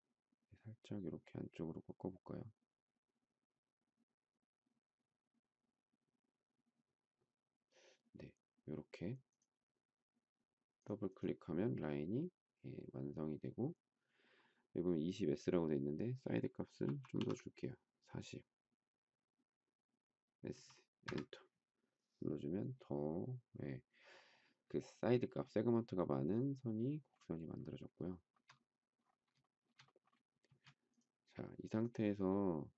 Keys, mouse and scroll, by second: 16.6 4, 18.1-18.8 typing, 20.3 s, 20.9 Return, 28.0 shift+middle click, 29.4 shift+middle click, 30.4 space.